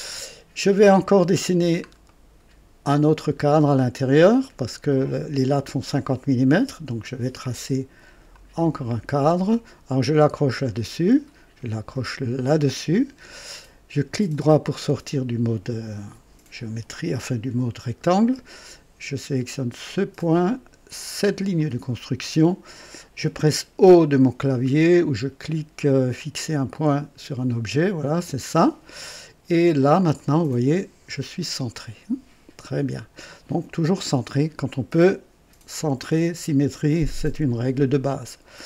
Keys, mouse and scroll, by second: 0.9 scroll up 1, 1.7 scroll down 1, 2.1 right click, 8.3 click, 10.5 click, 12.3 click, 14.7 right click, 19.9 click, 21.5 click, 28.1 o, 30.1-33.0 drag.